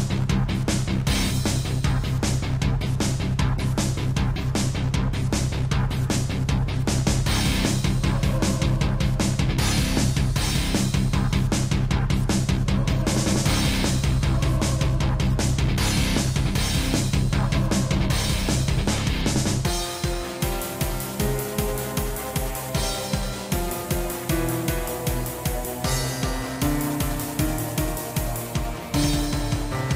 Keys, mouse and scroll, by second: 0.3 click, 1.4 g, 6.7 click, 7.7 typing, 8.1 click, 9.0-9.7 typing, 10.8 click, 11.2 middle click, 11.9 shift+middle click, 12.4 middle click, 12.9 shift+scroll, 13.3 shift+middle click, 13.6-13.9 scroll up 3, 13.9 typing, 14.3 click, 15.1 shift+middle click, 15.4 middle click, 16.4 3, 17.1 g, 22.6 click, 22.8 click, 23.1 scroll down 3, 23.4 z, 23.5 middle click, 25.0 click, 25.5 middle click, 26.0 z, 26.8 click, 27.1 middle click, 28.5 scroll up 1, 28.9 Tab, 29.3 middle click.